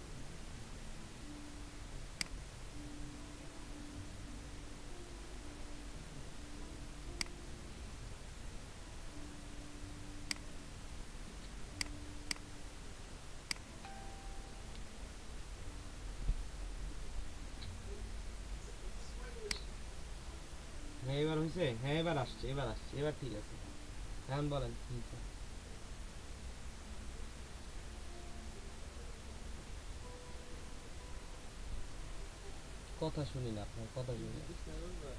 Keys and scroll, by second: 11.5 p.